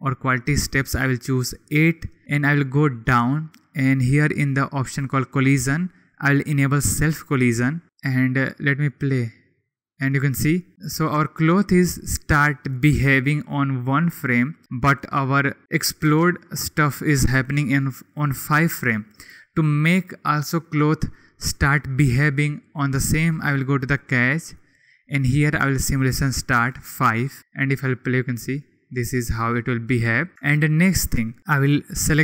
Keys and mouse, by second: 4.9-8.9 drag, 25.5-26.9 drag, 30.1 click.